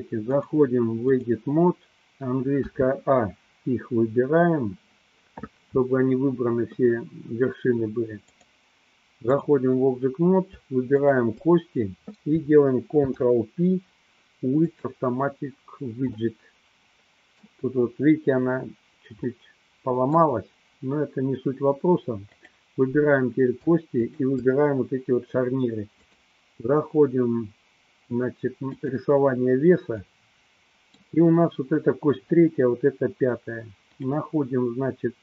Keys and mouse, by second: 0.3-1.5 drag, 2.7 a, 8.4-9.5 drag, 11.0 shift+click, 12.9 ctrl+p, 16.4-17.7 middle drag, 19.4 middle click, 22.4 click, 24.1 shift+click, 26.1-29.2 drag, 30.2 middle click, 34.0 click.